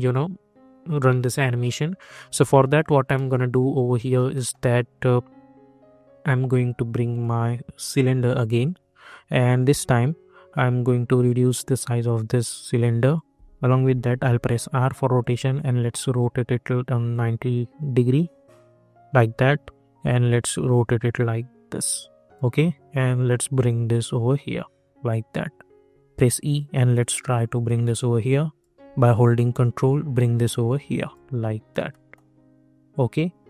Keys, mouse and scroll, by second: 3.1 middle click, 5.4 scroll up 1, 6.9 click, 10.3 scroll up 1, 11.2-14.3 drag, 14.3 r, 15.1-20.0 drag, 20.0-25.8 drag, 25.8 e, 26.5-29.1 drag, 29.1-31.9 ctrl+drag, 31.9 middle click.